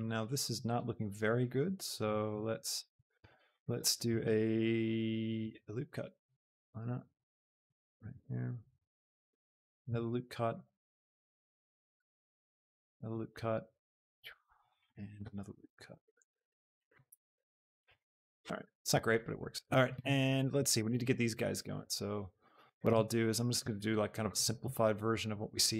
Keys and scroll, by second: 5.5 ctrl+r, 9.9 ctrl+r, 12.8 ctrl+r, 15.7 ctrl+r, 22.0 shift+Tab.